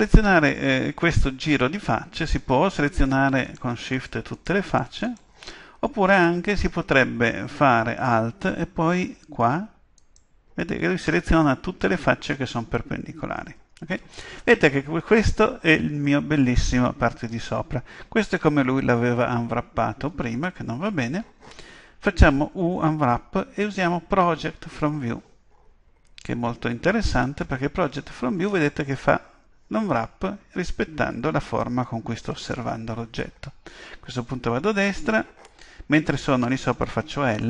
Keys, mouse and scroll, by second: 3.5-8.0 right drag, 10.0-11.8 right drag.